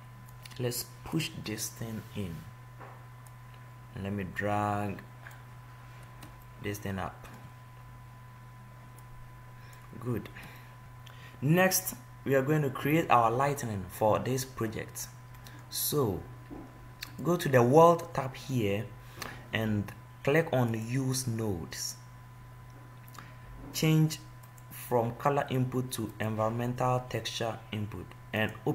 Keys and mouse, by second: 0.6-2.6 drag, 3.5-5.2 drag, 5.6-6.8 middle drag, 9.4 click, 15.2-17.3 middle drag, 17.8-19.4 drag, 21.0-22.9 drag, 24.7-26.7 drag, 28.6 click.